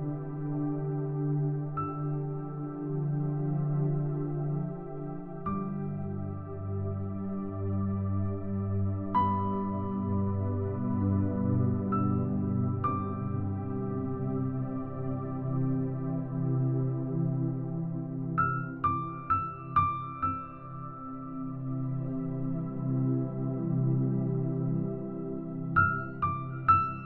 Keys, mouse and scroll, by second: 0.7 middle click, 0.7-1.3 scroll up 2, 3.2 click, 5.7-7.2 drag, 7.5 click, 8.4 middle click, 9.0 middle click, 10.1-13.2 drag, 13.4 middle click, 13.4-14.3 scroll up 2, 15.3 middle click, 15.3-16.1 scroll down 2, 16.3 click, 17.0-19.8 drag, 22.8 middle click, 23.8 e, 25.0 click, 25.3 click, 26.2 click.